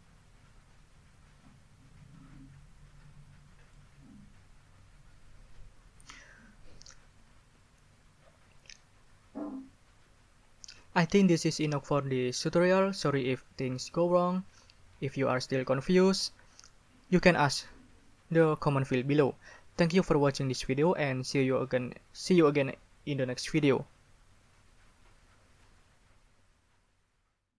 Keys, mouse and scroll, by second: 3.6-3.9 scroll up 2.